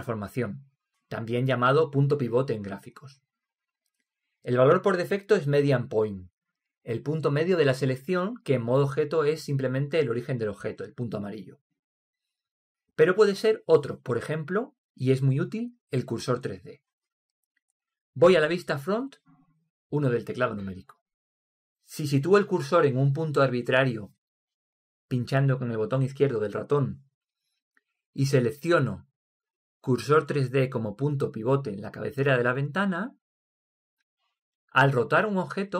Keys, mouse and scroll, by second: 0.3 click, 19.9 KP_1, 22.0-22.9 middle drag, 25.3 click, 29.9-31.7 drag.